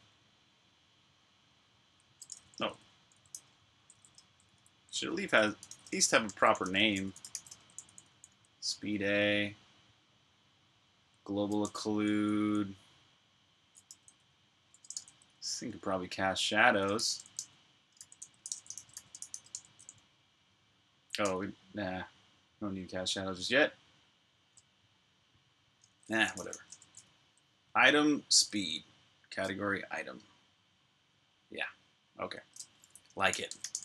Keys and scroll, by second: 0.4 typing, 1.6-8.4 typing, 10.6 typing, 11.9-12.3 typing, 13.6-14.8 typing, 16.4-19.3 typing, 21.0 u, 25.4-28.3 typing, 32.9-33.8 typing.